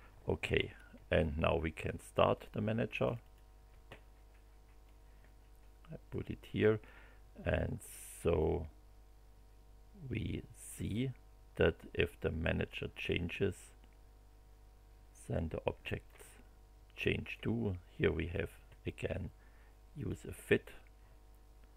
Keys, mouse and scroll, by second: 2.3 click, 3.0 click, 4.8-6.3 drag, 8.4-16.2 drag, 17.0 click, 18.3 click, 19.9 click.